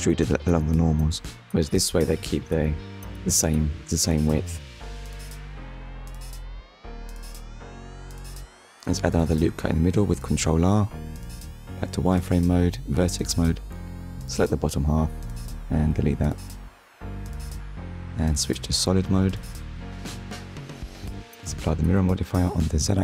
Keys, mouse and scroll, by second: 0.9 Tab, 1.8 middle click, 2.5 click, 2.8 middle click, 4.1 Tab, 4.7 middle click, 5.4 click, 5.8 middle click, 7.3 ctrl+r, 7.8 click, 9.2 KP_1, 11.2 click, 12.3 click, 13.0 click, 14.8 Delete, 15.7 click, 17.1 click, 18.1 Tab, 19.1 click, 20.3 click, 21.5 click, 22.4 click.